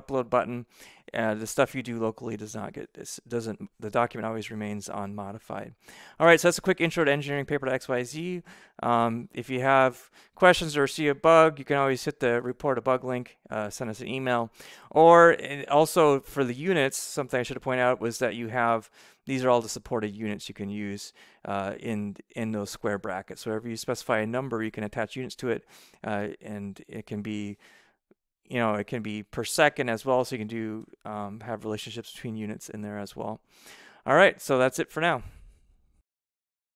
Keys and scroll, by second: 28.6-30.1 typing.